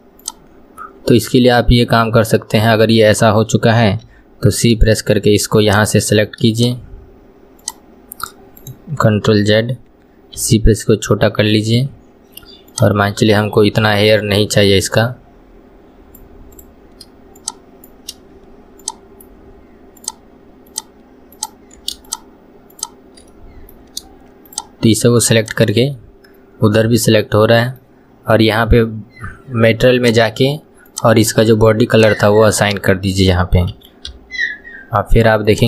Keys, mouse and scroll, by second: 0.3 click, 9.5 ctrl+z, 10.4 c, 17.4 shift+click, 18.9 ctrl+click, 20.0 ctrl+click, 20.7 ctrl+click, 21.4 ctrl+click, 22.1 shift+click, 22.8 shift+click, 23.3-24.5 middle drag, 24.5 shift+click, 25.5 shift+click, 26.0-29.0 middle drag, 29.2-29.7 scroll up 1, 30.0 click, 30.9 click, 32.0 click, 32.7-33.8 middle drag, 33.8 KP_1, 34.3 Tab, 34.6 scroll down 1, 35.5 click.